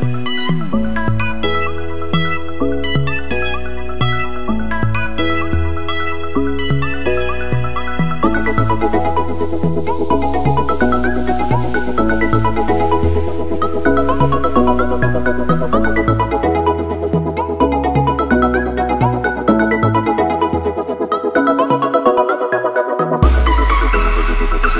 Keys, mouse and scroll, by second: 4.3 ctrl+c, 4.5 alt+Tab, 5.6 click, 9.2 click, 9.9 Return, 10.2 click, 11.3 KP_Add, 11.6 KP_9, 13.1 Return, 13.4 KP_Add, 13.6 KP_9, 15.3 click, 17.9 ctrl+c, 19.1 click.